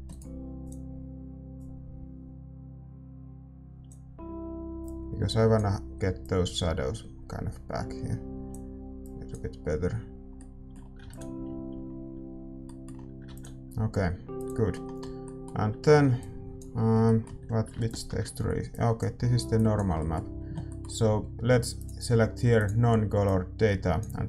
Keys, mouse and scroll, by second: 0.7-11.9 drag, 10.3-11.9 middle drag, 11.9 ctrl+s, 14.3 ctrl+s, 14.4-24.2 drag, 21.1-22.6 middle drag.